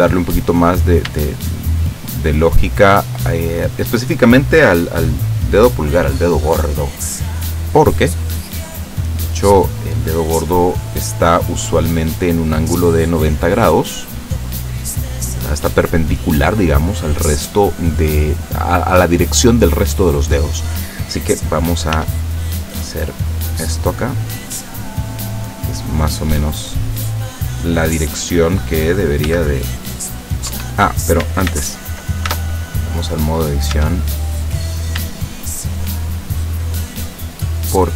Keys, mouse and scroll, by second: 1.4 shift+right click, 2.1 shift+right click, 2.6 shift+right click, 4.0-5.9 middle drag, 6.9-9.3 middle drag, 22.0 r, 27.8 click, 29.3 g, 30.5 Escape, 31.6 ctrl+z, 32.3 ctrl+Tab, 33.8 Tab, 34.4 right click, 35.4 shift+right click, 35.9 shift+right click, 36.7 shift+right click, 37.6 shift+right click.